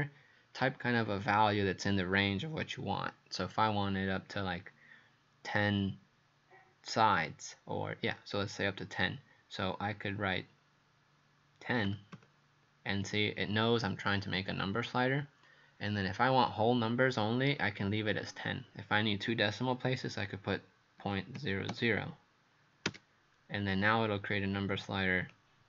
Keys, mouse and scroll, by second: 11.9 KP_1, 12.2 KP_0, 21.0 KP_Decimal, 21.4 KP_0, 21.7 KP_0, 22.9 KP_Enter, 25.3 click.